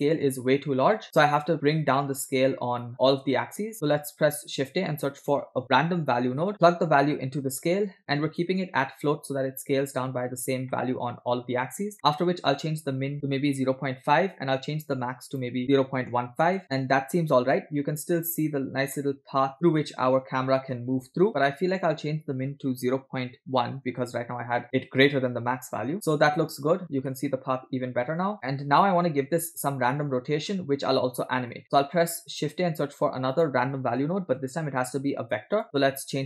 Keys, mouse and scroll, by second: 1.0-1.9 scroll down 6, 2.0 click, 2.3 click, 3.0 click, 3.7 middle click, 4.4 shift+a, 7.4-8.8 drag, 10.8 middle click, 11.0 scroll up 3, 11.8 scroll up 3, 12.6-14.7 drag, 15.4-16.6 drag, 16.6-17.0 middle drag, 17.3 scroll up 1, 17.8 shift+middle click, 18.6 scroll up 2, 19.1 shift+middle click, 19.5 scroll up 2, 19.9 shift+middle click, 21.7-24.2 drag, 24.3-25.9 drag, 25.9 scroll up 3, 26.8 middle click, 26.8 scroll down 2, 27.2-28.3 middle drag, 30.5-31.1 scroll down 4, 31.5 click, 31.9 middle click, 32.1 scroll up 2, 32.5 shift+a.